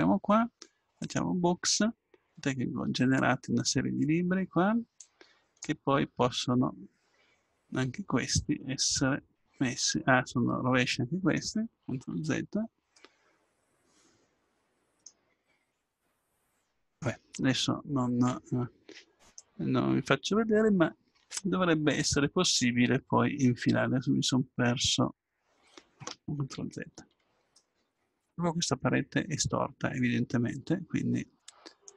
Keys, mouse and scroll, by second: 1.4-2.4 drag, 2.4 middle click, 5.0-6.6 drag, 8.7-10.2 middle drag, 10.2 middle click, 10.4 middle click, 12.2 ctrl+z, 16.7-18.7 drag, 19.3-26.5 drag, 26.5 ctrl+z, 31.8-31.9 drag.